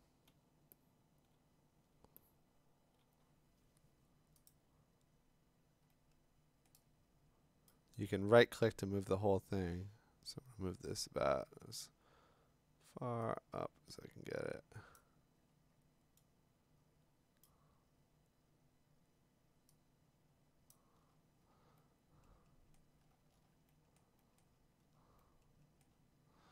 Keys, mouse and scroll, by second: 0.9 click, 1.3-2.2 click, 2.4 click, 2.5 click, 2.6-2.9 click, 3.0 click, 4.5 click, 6.7 scroll, 7.2 middle click, 7.7 right click, 11.7 right click, 14.9 click, 15.5 scroll, 15.5 middle click, 15.7 middle click, 17.4 right click, 17.7 scroll down 1, 19.5 right click, 20.7 click, 20.9-21.6 scroll, 23.0-23.5 scroll, 24.0-25.1 scroll, 25.8 scroll.